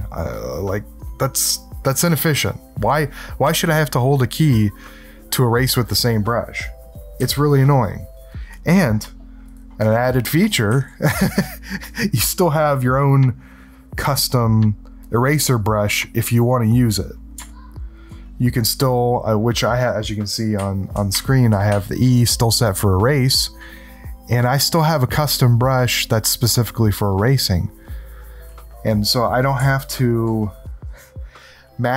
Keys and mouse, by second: 7.2 s, 10.7 e, 13.2 click, 15.0-16.5 drag, 17.5 ctrl+alt+click, 18.3 click, 20.5 e, 21.1 e, 21.7 e, 29.6 ctrl+alt+click, 30.4 click.